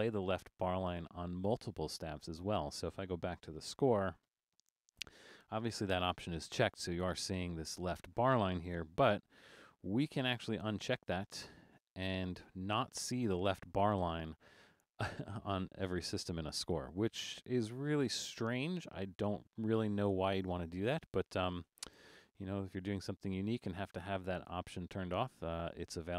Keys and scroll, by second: 3.7 alt+super+/, 5.9 super+=, 8.8 alt+super+a.